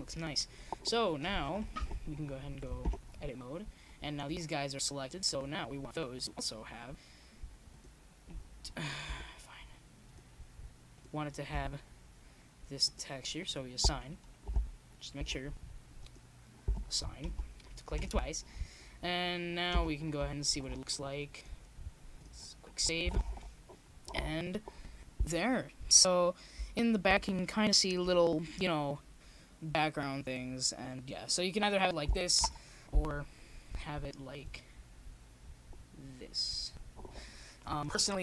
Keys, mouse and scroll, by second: 1.1 z, 2.2-5.4 middle drag, 6.1 KP_0, 8.2 middle click, 8.7 Tab, 10.2 Tab, 10.8 click, 12.8-17.7 drag, 17.7 Tab, 18.6 click, 19.3-21.4 drag, 20.9 Tab, 21.4 middle click, 22.1-24.1 drag, 23.8 Tab, 24.8 Tab, 25.4 click, 26.6 KP_0, 29.2 Tab, 31.0 middle click, 31.6 click, 32.9 shift+z.